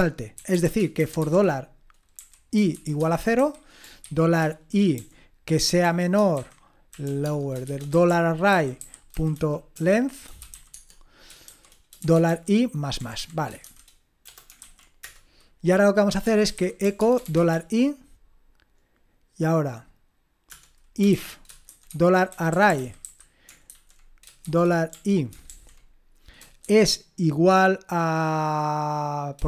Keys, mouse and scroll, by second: 0.5-18.0 typing, 20.5 Return, 20.8-25.5 typing, 26.6 typing.